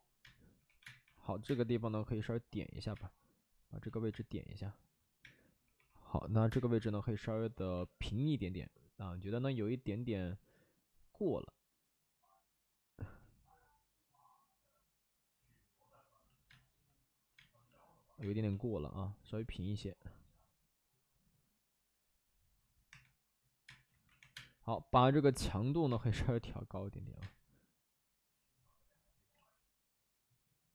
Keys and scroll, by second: 0.1-1.4 typing, 2.7 ctrl+z, 2.9 space, 4.0 space, 5.1 space, 5.7 2, 6.4 space, 6.6 2, 7.5 ctrl+z, 16.4 space, 17.3 space, 18.1 space, 22.8-24.9 typing, 23.8 ctrl+z, 27.0 ctrl+z, 27.1 space, 29.3 ctrl+z.